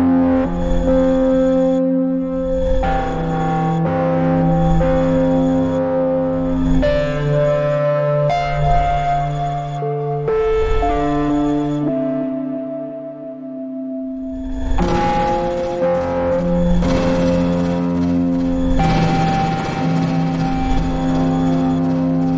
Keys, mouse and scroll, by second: 1.6 ctrl+scroll up 1, 2.6 e, 3.6-5.0 drag, 5.0 Delete, 5.2 r, 6.2-8.3 drag, 9.8 scroll down 2, 10.4 click, 13.4 ctrl+scroll down 1, 13.8-17.3 drag, 17.3-17.6 ctrl+scroll down 1, 17.6 click, 18.0 ctrl+scroll up 1, 18.7-20.4 drag, 20.4-22.3 shift+drag.